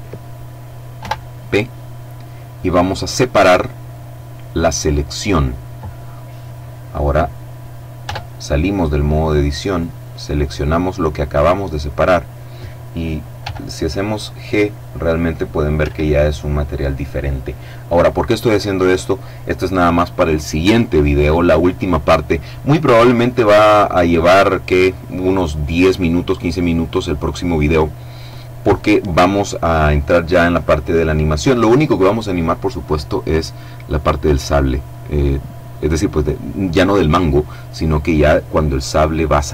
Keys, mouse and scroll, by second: 0.1 p, 3.7 click, 7.1 Tab, 8.7 right click, 12.5 g, 14.8 Escape, 34.5-35.3 scroll down 1.